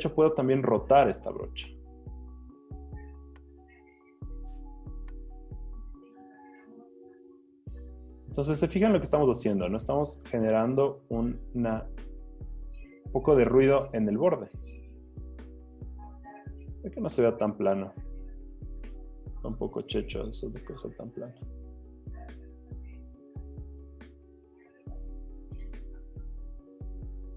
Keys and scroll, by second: 3.7 Return.